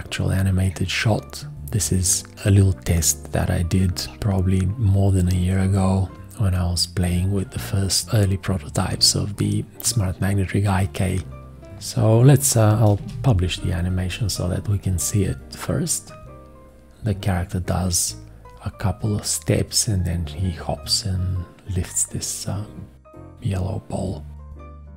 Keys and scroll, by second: 13.0 ctrl+Return.